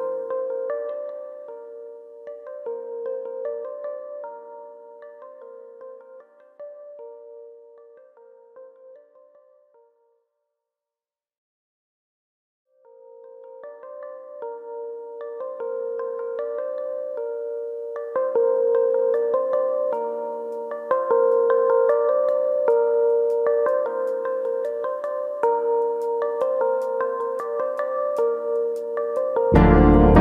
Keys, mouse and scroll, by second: 0.3 2, 0.4 click, 0.6 middle click, 1.6 g, 3.0 click, 3.1 middle click, 3.5 shift+middle click, 3.7 middle click, 4.1 click, 6.2 ctrl+r, 8.2 click, 8.5 click, 8.8 shift+middle click, 9.4 click, 11.4 middle click, 11.7 shift+middle click, 12.0 middle click, 12.7 click, 13.5 click, 13.8 middle click, 14.1 click, 15.6 click, 16.5 click, 17.4 middle click, 18.4 middle click, 19.0 click, 20.3 click, 21.5 middle click, 22.0 middle click, 22.8 click, 23.3 middle click, 23.5 ctrl+z, 23.8 shift+click, 24.0 middle click, 24.6 click, 29.8 click.